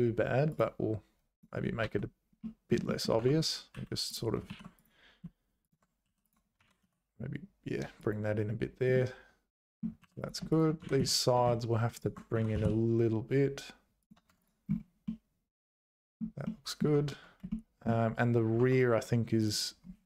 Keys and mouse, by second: 1.3 click, 2.4 middle click, 2.8 shift+middle click, 3.2 Tab, 3.7 2, 4.4 ctrl+r, 6.0 2, 6.6 g, 9.1 click, 10.0 3, 10.8 g, 12.3 g, 14.3 Tab, 15.0-16.2 middle drag, 16.4 middle click, 16.9 Tab, 17.5 shift+middle click.